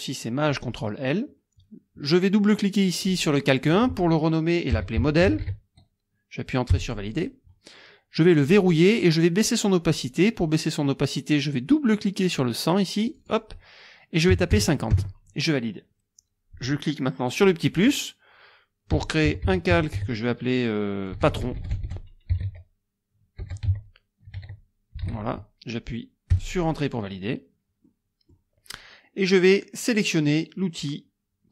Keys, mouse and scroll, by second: 0.5 click, 3.0 click, 4.5-5.7 typing, 6.7 Return, 8.5 click, 13.1 click, 14.3 KP_5, 14.5 KP_0, 14.9 KP_Enter, 17.7 click, 18.7-25.6 typing, 26.3 Return, 27.8 click.